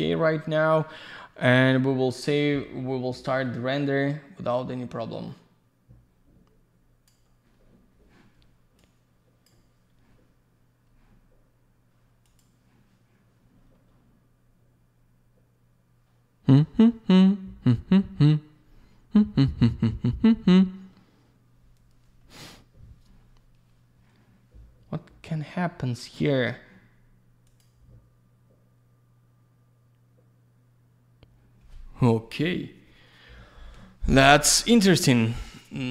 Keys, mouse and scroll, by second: 3.2 click, 8.8 click, 12.3 click, 12.4 click, 27.5 click, 27.6 click.